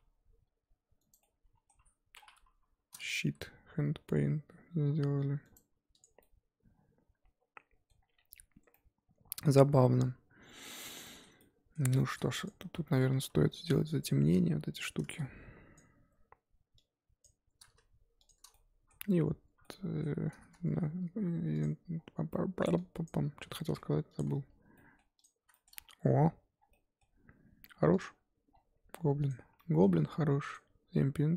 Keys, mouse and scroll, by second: 1.2 middle click, 2.2-2.5 scroll down 3, 2.5 KP_7, 3.2 r, 6.0 click, 6.2-12.4 middle drag, 12.4 click, 12.5 scroll up 1, 12.7 Tab, 12.8 middle click, 13.1 scroll up 2, 13.2 3, 13.7-14.8 shift+middle drag, 14.8 click, 15.7 shift+click, 17.2 shift+click, 18.5 shift+click, 18.5-21.5 middle drag, 21.5-23.3 drag, 23.3 g, 24.2 Tab, 24.7 middle click, 25.2 click, 25.5 shift+middle click, 25.7 scroll up 1, 26.5 scroll down 1, 26.7-27.9 middle drag, 27.9 click, 28.5-29.2 scroll down 4, 29.6 middle click, 30.5 click.